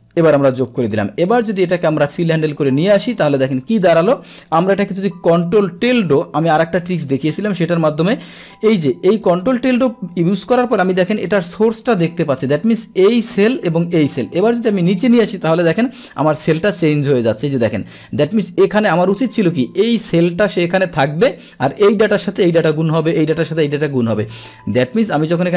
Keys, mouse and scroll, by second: 0.9-2.6 drag, 7.4 click, 14.5 Down, 16.2 Down, 16.5 Down, 25.0 Down, 25.4 Down.